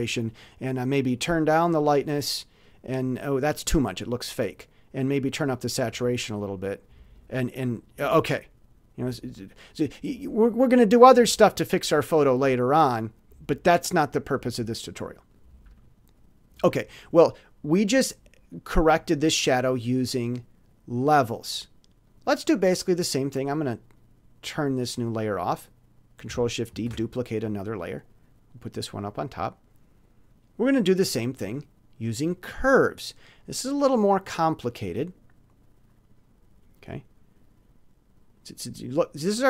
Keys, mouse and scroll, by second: 0.3 scroll down 2, 1.6 click, 3.4 click, 5.1 click, 5.9 click, 7.1 click, 13.6 click, 17.9 click, 20.3 click, 22.0 click, 23.9 click, 25.2 click, 26.7 ctrl+shift+d, 28.0 click, 31.2 click, 32.9 click, 34.8-36.2 drag.